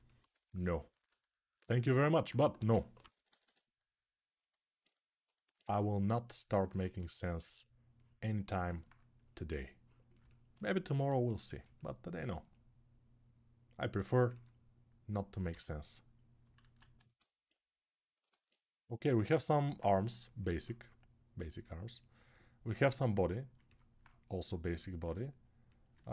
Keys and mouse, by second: 2.3-3.2 typing, 6.1-26.1 ctrl+alt+right drag, 6.6 1, 15.3 g, 16.4 alt+q, 20.3 alt+q.